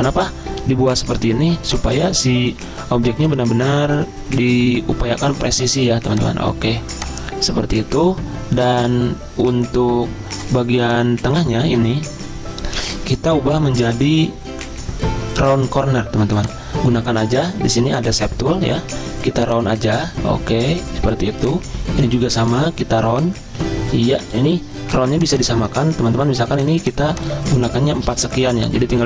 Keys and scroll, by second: 28.0 ctrl+c.